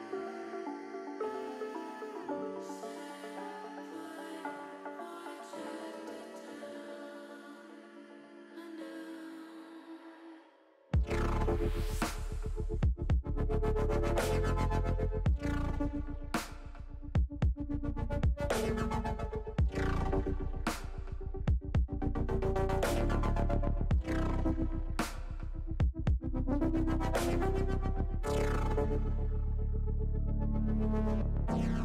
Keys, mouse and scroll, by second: 0.8 click, 2.0 middle click, 2.8 click, 3.0 middle click, 4.2-6.1 drag, 6.2 ctrl+z, 7.2-8.7 drag, 9.4 middle click, 10.9 KP_3, 12.6 click, 13.4 click, 15.2 click, 15.8 shift+click, 19.7 shift+middle click, 20.7 shift+middle click, 22.8 shift+click, 23.7-25.5 drag, 27.2 middle click, 28.4 click, 29.7 shift+click, 30.7 KP_1, 31.7 KP_3.